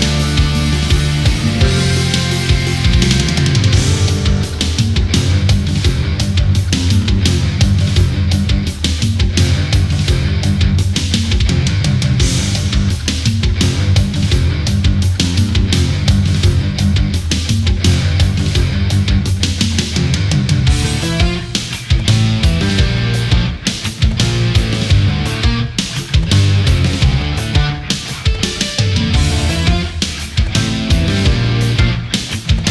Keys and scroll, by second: 2.7 space, 4.0 space, 5.9 space, 9.7 space, 10.4 ctrl+-, 10.8 space, 12.2 ctrl+=, 12.4 ctrl+-, 14.7 space, 16.2 space, 31.7 space.